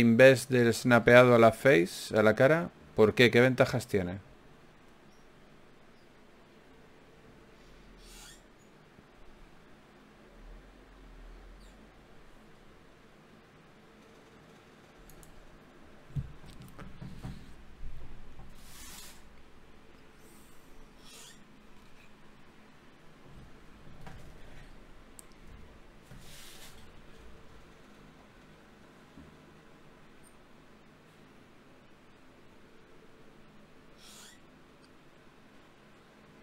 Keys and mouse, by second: 7.3 right click, 7.9 ctrl+Tab, 16.9 Tab, 19.6 Tab, 23.4-27.6 drag, 29.2-32.9 middle drag, 35.6-36.4 middle drag.